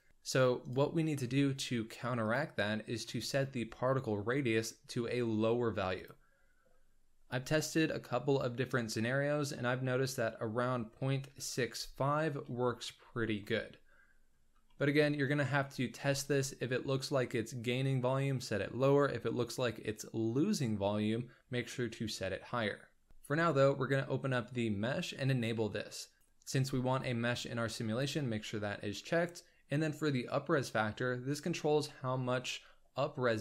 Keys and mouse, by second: 0.1 s, 2.2 click, 6.0-12.9 drag, 14.6 shift+click, 15.6 ctrl+click.